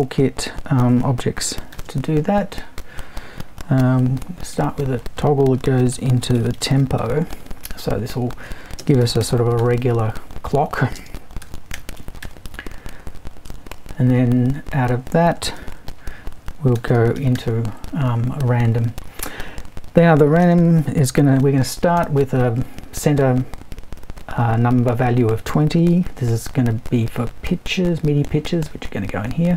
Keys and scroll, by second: 1.7 shift+super+t, 4.5 super+i, 5.7-7.5 typing, 8.8-12.7 typing, 15.6 super+i, 16.5-17.8 typing, 20.4 space, 21.6-22.5 typing.